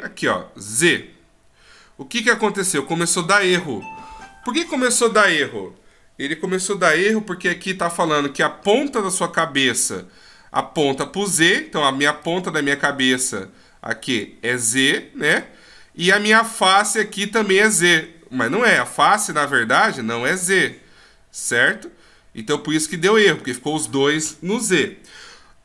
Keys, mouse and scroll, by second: 0.7 click, 12.1 d, 12.2 click.